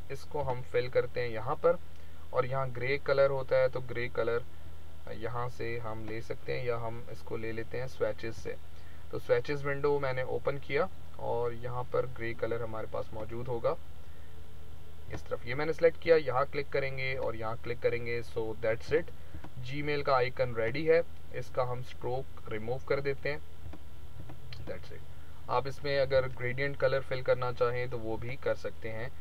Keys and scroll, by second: 26.1 ctrl+-.